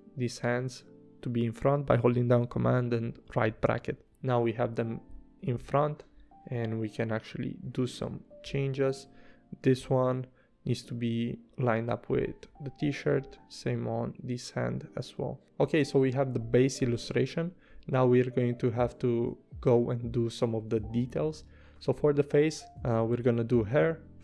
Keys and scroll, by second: 2.7 super+], 3.6 super+], 16.9 a.